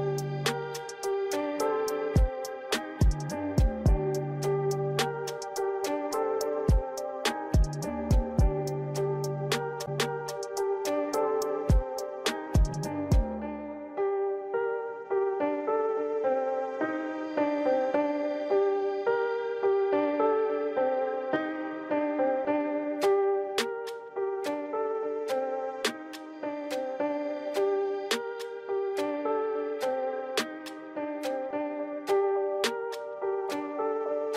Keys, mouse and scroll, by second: 1.0-1.5 scroll down 8, 1.5-1.8 scroll up 6, 1.8 click, 2.5 Tab, 2.9 BackSpace, 3.0 BackSpace, 3.1 BackSpace, 4.3-5.9 typing, 7.2 shift+Left, 7.3 shift+Left, 8.4 click, 15.4 scroll down 5, 15.7-16.8 scroll up 4, 21.7 click, 21.9 Tab, 22.2 scroll down 3, 22.3 scroll up 4, 23.4 shift+a, 24.4 click, 24.7 Tab, 25.1 BackSpace, 25.4 BackSpace, 25.7 shift+p, 26.6 shift+Left, 27.7 click, 32.2 Tab, 32.6 right click.